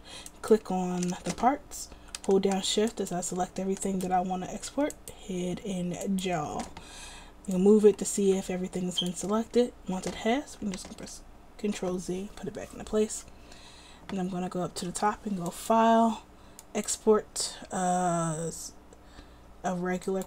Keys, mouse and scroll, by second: 11.2 ctrl+z.